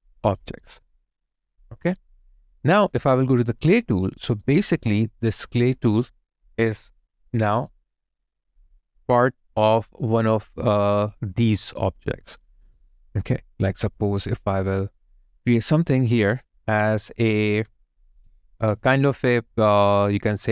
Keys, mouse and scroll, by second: 0.5 alt+right click, 1.0 alt+click, 4.2 alt+click, 4.4 alt+right click, 4.8 alt+middle click, 10.0 alt+click, 10.7 alt+right click.